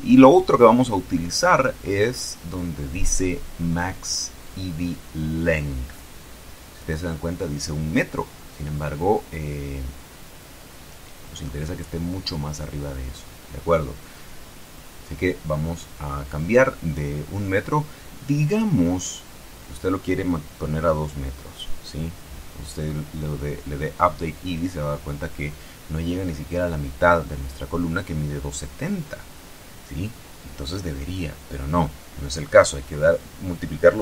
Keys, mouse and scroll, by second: 0.0-0.6 scroll down 2, 3.6 scroll down 1, 5.7 click, 8.2-10.2 drag, 16.8 click, 18.7 2, 19.6 KP_Enter, 21.4-22.0 scroll up 2, 22.0-22.6 scroll up 1, 23.1 click, 25.2-25.7 scroll down 2, 25.7-28.6 shift+middle drag, 29.8 click, 30.1-30.6 scroll down 2, 31.1 KP_4, 31.4 KP_Enter, 32.6-33.5 scroll up 2, 33.5 click.